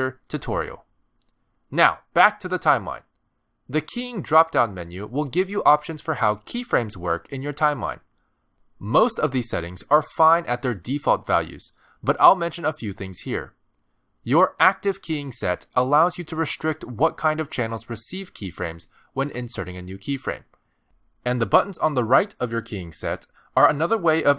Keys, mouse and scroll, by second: 0.1 click, 1.1 space, 2.0 click, 9.2 click.